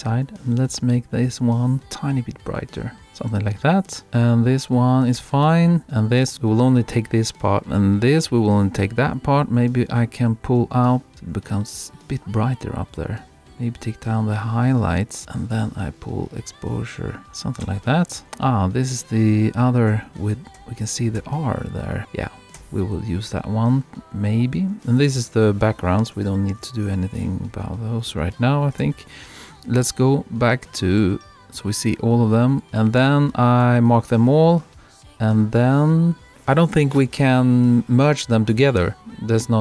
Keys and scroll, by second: 0.4 Right, 3.0 Left, 3.3 Right, 5.2 Right, 17.7 Right, 19.3 Left, 20.6 Right, 22.6 Right.